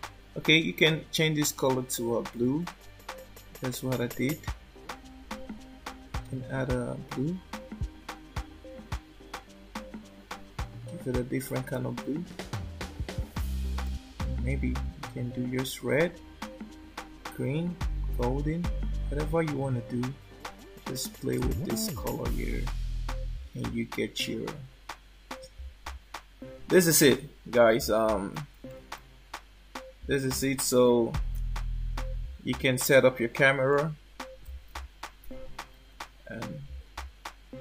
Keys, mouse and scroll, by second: 0.7 click, 27.2 scroll down 4, 28.6 shift+middle click, 33.7 shift+middle click, 35.2 ctrl+alt+KP_0.